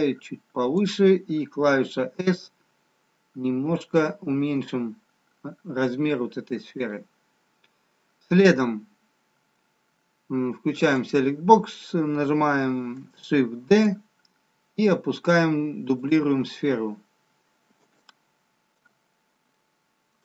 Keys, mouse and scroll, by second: 2.2 click, 2.2 s, 4.1 s, 10.7 click, 13.6 shift+d, 16.4-17.6 scroll up 1, 17.6-18.9 scroll up 1, 18.9 alt+middle click.